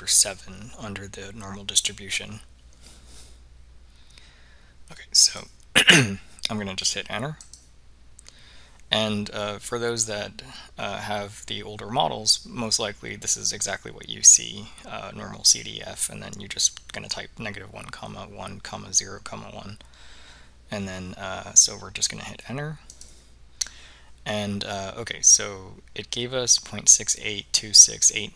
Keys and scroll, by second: 5.4 Return, 7.5 Return, 23.0 Return.